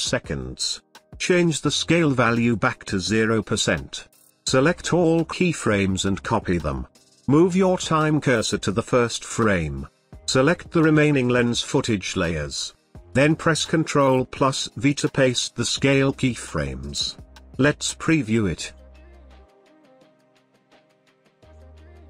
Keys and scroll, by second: 5.6 ctrl+c, 13.4 ctrl+v.